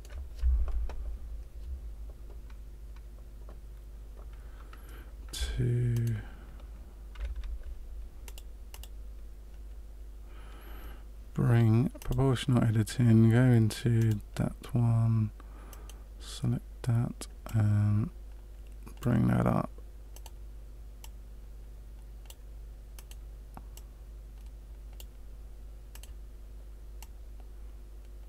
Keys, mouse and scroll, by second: 6.0 alt+right click, 8.2 click, 8.8 click, 11.9 click, 14.0 click, 15.7 right click, 17.4 click, 20.2 right click, 21.0 click, 22.9 right click, 23.7 click, 26.0 right click, 26.9 click.